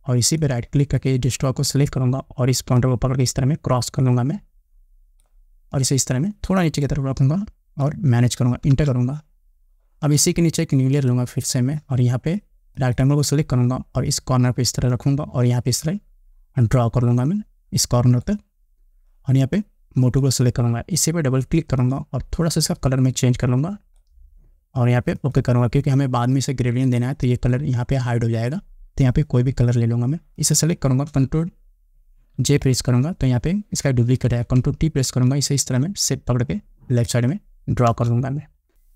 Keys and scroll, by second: 8.9 Return, 32.6 ctrl+j, 34.3 ctrl+t, 38.1 Return.